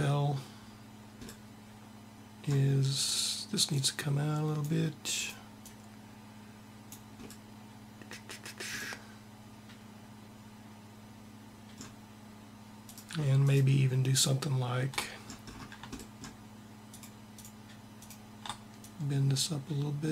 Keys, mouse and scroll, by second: 2.7 click, 12.6-15.3 drag, 19.7 click.